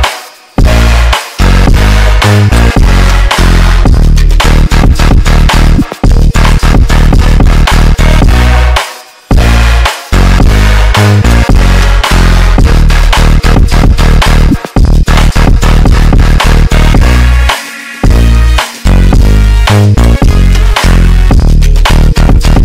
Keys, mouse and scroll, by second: 4.7 g, 14.3 g, 20.9 right click, 22.3 g.